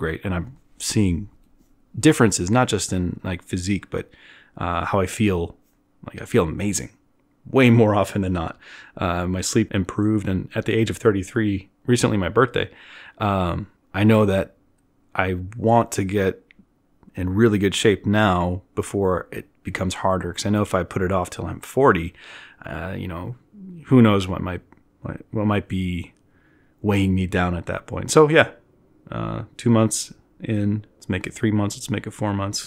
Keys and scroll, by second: 12.3-15.3 typing.